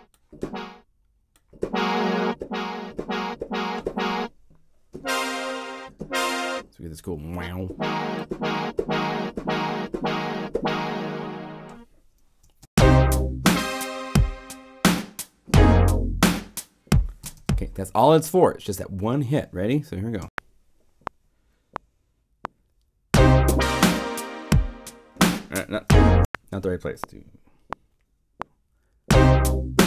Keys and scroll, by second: 12.4 0, 12.6 Return, 17.2 0, 20.1 *, 26.1 '.